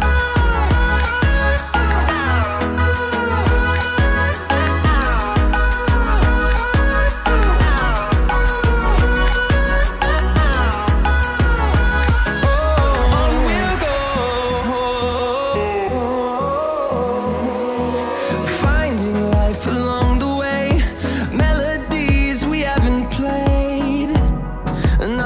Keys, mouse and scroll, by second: 0.1 Down, 2.3-6.6 drag, 6.6-8.5 drag, 8.5 Up, 11.7-22.8 drag, 24.8 click.